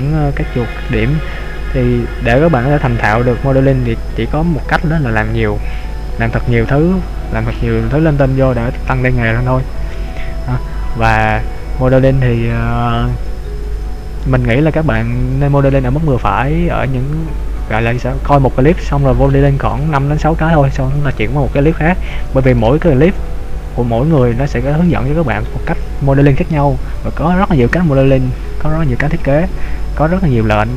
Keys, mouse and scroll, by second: 7.5 scroll down 1, 7.5 scroll up 1, 7.8 scroll down 1, 7.9 scroll up 1, 8.1-8.8 scroll down 1, 8.9 scroll up 2, 9.4-9.9 scroll up 1, 9.9 middle click, 15.1-17.1 scroll down 2.